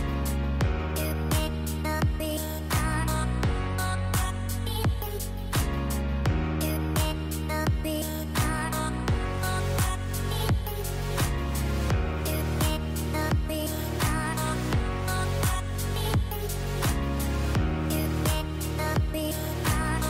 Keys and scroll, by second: 8.6 KP_0, 11.5 space, 14.7 space, 19.6 space.